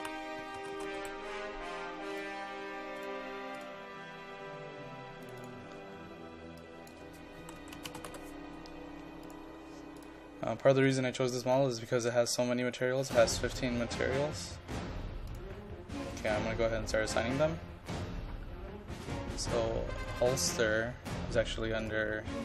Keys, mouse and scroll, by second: 0.0-1.5 typing, 2.1-6.4 drag, 7.2-8.6 typing, 9.3 click, 11.2-11.9 scroll up 1, 12.1-12.7 scroll down 1, 12.7-13.1 scroll up 1, 13.1-13.5 scroll down 1, 13.5-14.4 scroll up 1, 14.4 click, 16.9-17.2 scroll up 1, 19.1 click.